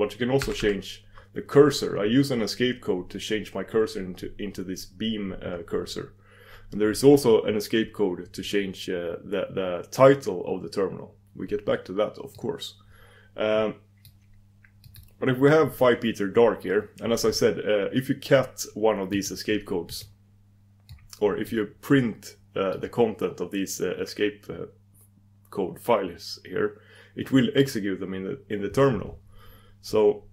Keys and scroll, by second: 21.6 super+d, 22.8 super+d, 25.9-26.7 typing.